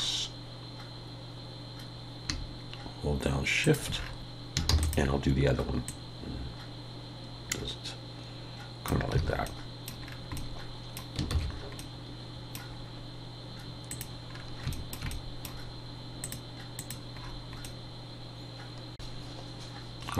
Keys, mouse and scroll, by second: 4.1 scroll down 6, 4.4 shift+scroll up 1, 4.7 shift+d, 5.9 click, 9.2 alt+a, 9.5 middle click, 10.0-10.4 scroll down 3, 10.4 middle click, 11.0 scroll up 1, 11.4 ctrl+s, 11.8 middle click, 13.9 click, 14.3-14.7 scroll down 3, 14.7 shift+middle click, 15.1 middle click, 16.2 click, 17.2-17.6 scroll up 4, 17.6 middle click, 19.1 shift+middle click, 19.1 click, 19.1-19.4 shift+scroll up 1, 19.1 KP_1.